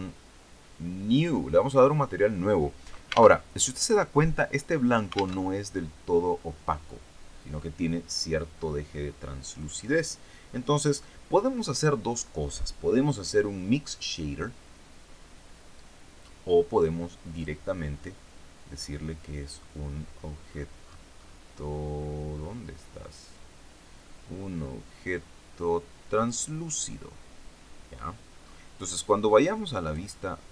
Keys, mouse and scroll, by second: 1.1 click, 3.3 alt+Tab, 5.3 alt+Tab, 9.5 click, 17.3 click, 20.1-21.9 scroll down 2, 21.9-22.5 scroll up 1, 26.1 click, 27.9-28.2 scroll down 1, 28.3-28.7 scroll up 1, 29.7 click.